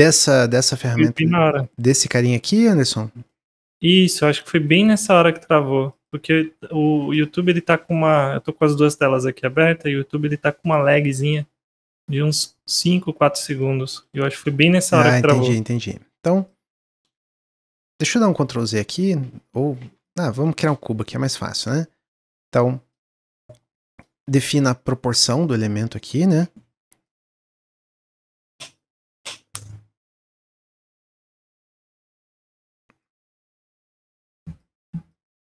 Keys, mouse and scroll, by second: 1.0 Tab, 3.2 middle click, 3.5 scroll up 1, 3.9-5.0 middle drag, 5.0 x, 6.2 Tab, 6.7 middle click, 7.0 click, 12.0-15.4 middle drag, 15.4 shift+a, 16.4 click, 16.8 ctrl+z, 17.0 ctrl+z, 17.9 ctrl+z, 18.1 ctrl+z, 18.3 ctrl+z, 18.5 ctrl+z, 18.7 ctrl+z, 18.9 ctrl+z, 19.8 Tab, 20.0 click, 20.4 shift+a, 22.4 click, 23.3 click, 24.1 s, 26.1 s, 27.6-32.6 drag, 33.6 click, 35.0 click.